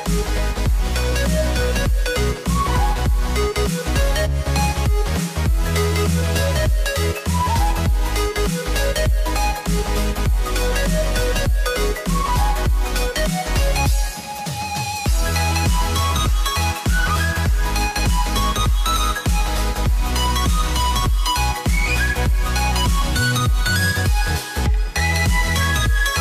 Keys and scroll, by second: 11.3 alt+BackSpace.